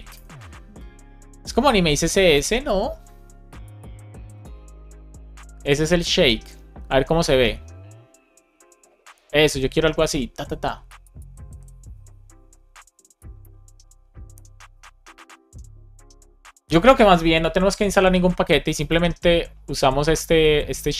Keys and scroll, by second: 0.1 Return.